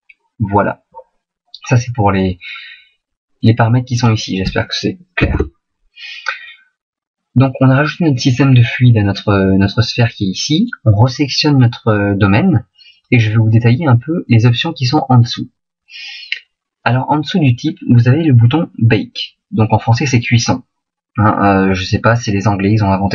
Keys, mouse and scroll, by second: 3.9 click, 10.6 right click.